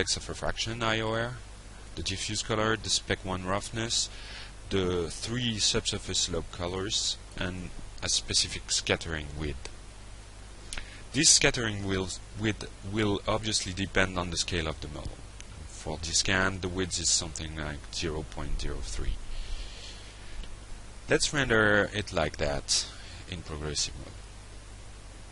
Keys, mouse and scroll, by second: 1.4 click, 7.6 click, 8.2 click, 9.0 click, 13.8 shift+0, 14.3 shift+2, 15.0 Return, 16.9 click, 20.4 click, 21.6 click.